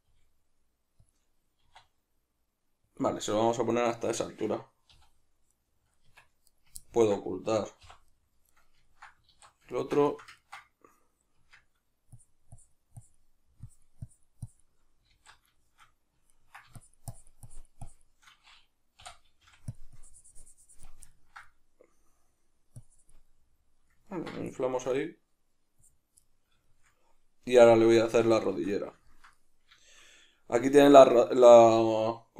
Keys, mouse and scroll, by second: 0.0 g, 1.1 click, 1.6 e, 3.0 click, 5.0 z, 5.6-6.5 middle drag, 6.1 Tab, 6.5 right click, 6.9-8.5 ctrl+middle drag, 7.8 h, 8.5 right click, 8.9-12.2 ctrl+middle drag, 9.3 alt+q, 11.4 Tab, 12.2-15.6 shift+drag, 15.2 alt+q, 15.6-16.8 shift+middle drag, 16.8-19.8 shift+drag, 20.0-21.2 drag, 21.2-22.8 ctrl+middle drag, 22.8 click, 23.3-24.5 middle drag, 24.5-26.2 shift+drag, 26.2-32.3 middle drag, 28.1 Tab.